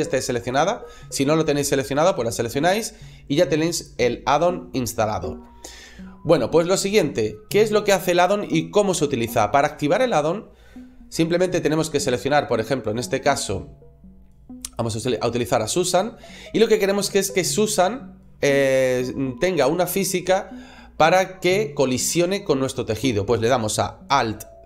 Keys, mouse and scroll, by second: 4.8 middle click, 14.5 right click, 24.5 alt+c.